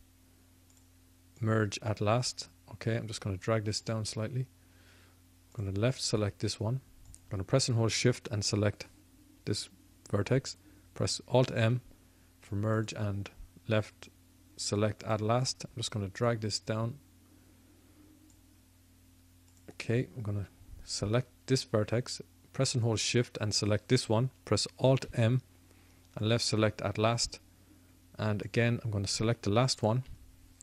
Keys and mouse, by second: 0.7-3.0 drag, 6.0-12.9 drag, 11.4 alt+m, 12.9 alt+m, 13.9 middle click, 15.0-18.5 drag, 19.4-22.4 drag, 22.7-24.8 drag, 24.8 alt+m, 26.7-28.2 middle drag, 28.4-30.6 drag.